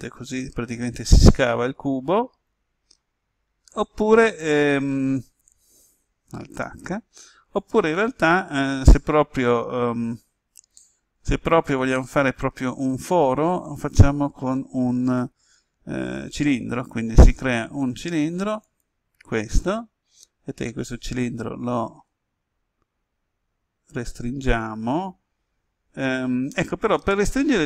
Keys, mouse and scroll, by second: 4.2 click, 6.9 alt+h, 11.9-13.1 middle drag, 13.3-14.7 scroll down 1, 16.1 shift+a, 18.6 click, 21.3 s.